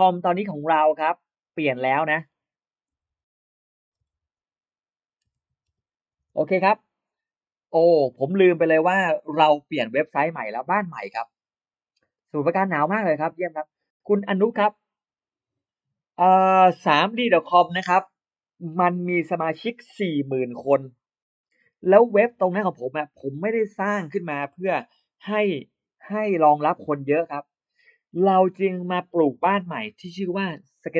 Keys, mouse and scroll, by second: 0.9 click, 1.6 click, 2.8-6.1 typing, 6.1 Return, 7.9 click, 16.5 click.